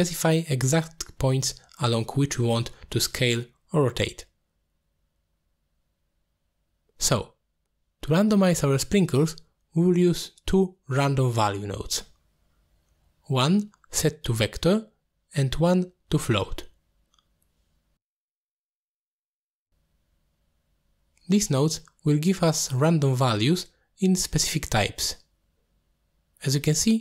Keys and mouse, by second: 0.5 ctrl+z, 1.6 click, 2.4 click, 3.0-3.7 drag, 4.0-4.6 drag, 5.0 click, 5.4-5.8 drag, 6.0 click, 7.7 middle click, 9.7 middle click, 10.2 click, 11.1-11.4 drag, 11.7 g, 12.4 drag, 12.7 g, 13.4 drag, 13.6 middle click, 14.0 shift+a, 18.5 shift+d, 19.4-20.4 drag, 20.7 click, 21.0 middle click, 22.3 click, 22.5-24.2 drag, 24.7 click, 24.9 click, 25.5 click, 26.4 middle click.